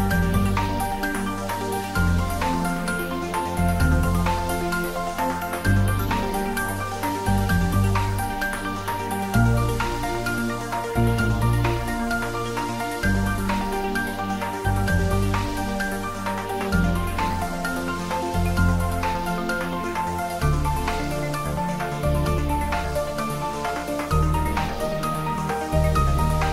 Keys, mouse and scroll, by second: 2.0 click, 3.0 Tab, 4.4 click, 5.2-5.7 scroll down 1, 7.0 click, 8.3 click, 8.6 ctrl+s, 8.9-10.2 middle click, 9.6-12.6 ctrl+middle drag, 12.6 click, 14.8 click, 15.6-16.5 scroll down 1, 18.6 click, 19.6 Tab, 20.3 click, 20.4 middle click, 21.1-22.0 typing, 21.9-22.3 middle drag, 23.3 click, 25.4 3, 25.5 click.